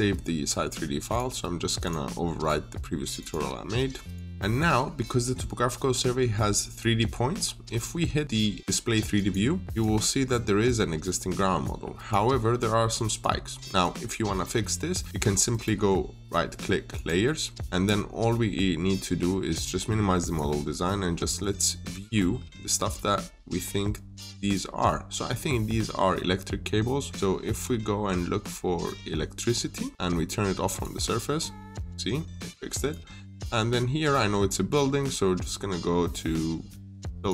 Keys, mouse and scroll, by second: 4.3 middle click, 5.9-6.2 scroll up 1, 7.2-7.6 scroll down 1, 9.0 click, 10.5-11.5 scroll up 1, 11.5 click, 12.2-12.7 scroll up 1, 12.7 scroll down 1, 13.0 click, 15.4 right click, 16.8 click, 21.7-23.6 scroll down 1, 24.1 click, 27.5-28.8 scroll up 1, 30.5 click.